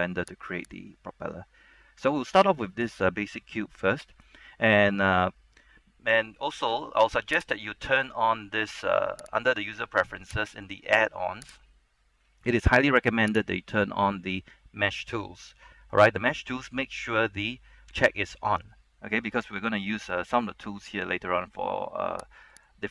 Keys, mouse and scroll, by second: 1.8-6.3 scroll up 1, 7.5 click.